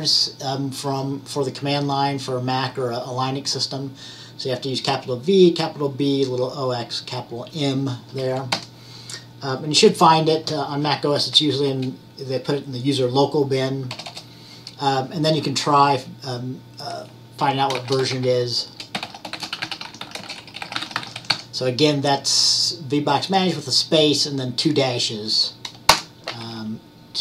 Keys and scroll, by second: 17.9-21.9 typing.